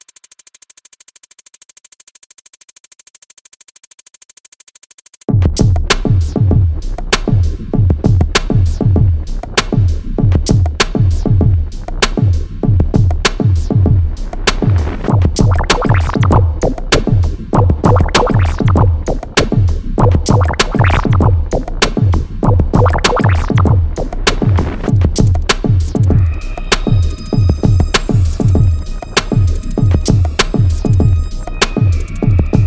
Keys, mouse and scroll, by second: 0.0 Delete, 0.5 ctrl+j, 1.6 click, 3.7 click, 5.5 click, 6.9 click, 9.2 click, 10.1 click, 10.7 alt+scroll down 1, 11.0-11.5 alt+scroll up 1, 13.6 shift+Num_Lock, 13.6 alt+scroll up 1, 13.7 shift+click, 17.5 click, 20.9 click, 23.5 click.